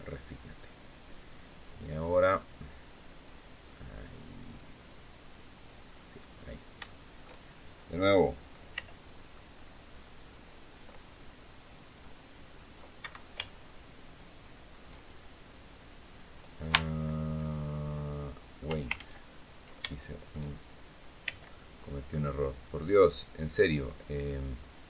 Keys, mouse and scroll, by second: 1.1-2.3 middle drag, 3.3 click, 4.3 click, 4.9 click, 5.3 click, 6.1-6.5 scroll up 1, 6.6 shift+middle click, 8.5 c, 9.1-10.8 drag, 11.8 click, 12.7 Escape, 13.2-14.6 shift+drag, 16.5-18.5 shift+drag, 18.7 ctrl+shift+z, 19.6 ctrl+shift+click, 21.0 c, 21.8-22.9 drag, 23.4-24.8 drag.